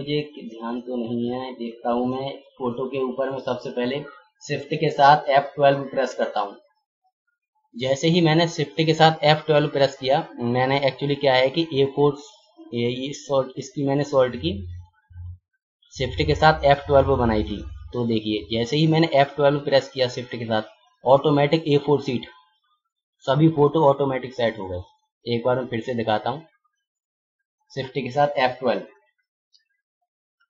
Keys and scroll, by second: 6.1 shift+F12, 29.5 shift+F12.